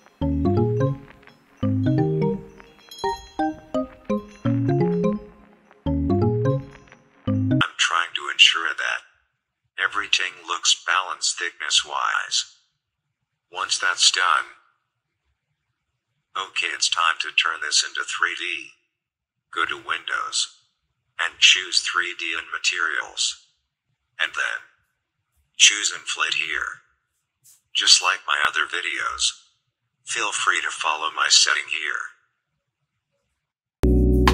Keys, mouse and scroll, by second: 2.2 click, 2.2 click, 3.2-5.5 alt+drag, 6.5 right click, 7.3-11.7 drag, 13.9 click, 19.8-22.1 drag, 25.9 click, 29.0 click, 32.1 click, 33.8 click.